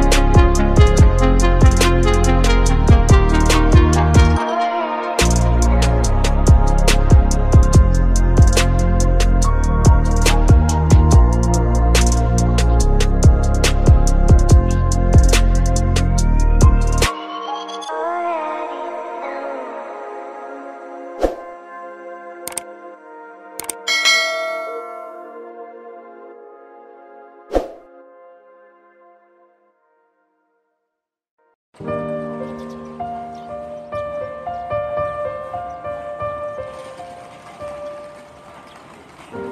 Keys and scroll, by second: 2.2 space, 6.1 space, 15.9 ctrl+z, 23.5 space, 26.5 space, 30.3 space, 31.9 space.